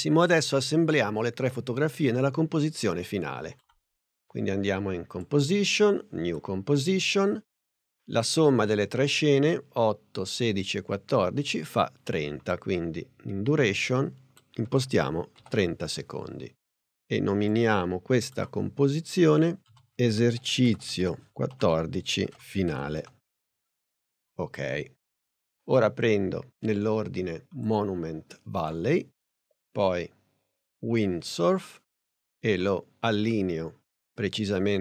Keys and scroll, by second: 14.7 3, 15.5 0, 19.3-23.2 typing.